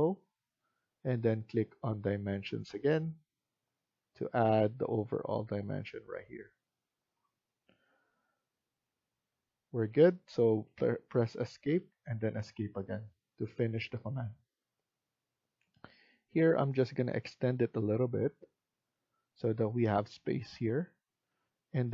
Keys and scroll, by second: 10.5 Escape, 11.7 Escape, 21.1 Escape.